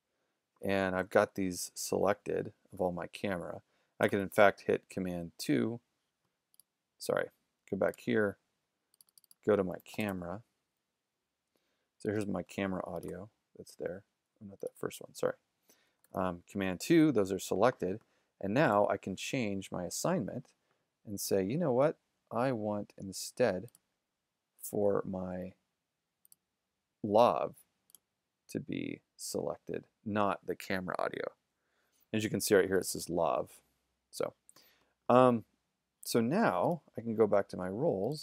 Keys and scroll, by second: 1.1 super+-, 4.1 super+2, 9.5-10.6 typing.